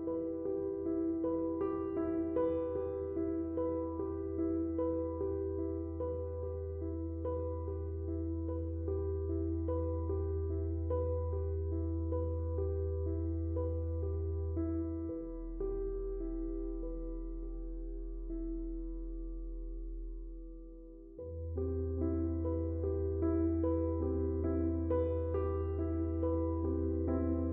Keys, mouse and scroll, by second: 7.3 space, 7.4 click, 8.7 space, 9.9 click, 10.1 space, 11.0 click, 12.3 typing, 12.8 shift+click, 17.7-20.4 drag, 20.6 space, 20.8 click, 21.0 space, 21.5 click, 21.9 space.